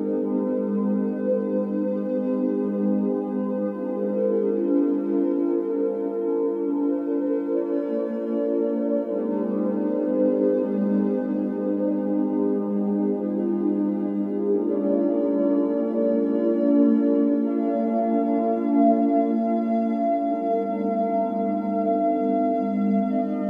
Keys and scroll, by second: 2.9 typing, 4.3 space, 7.7-9.3 typing, 19.6 Escape.